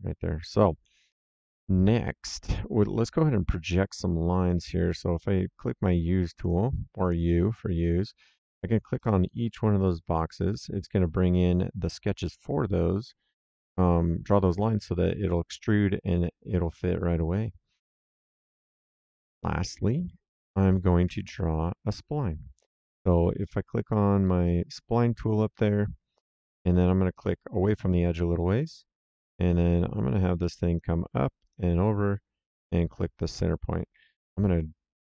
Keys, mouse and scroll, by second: 0.8 middle click, 2.9 right click, 6.4 click, 8.3 click, 12.2 middle click, 13.5 right click, 15.2 middle click, 15.7 right click, 18.4 click, 20.0 middle click, 21.0 s, 23.8 click, 27.1 click, 30.6 click, 33.1 click, 33.9 Escape.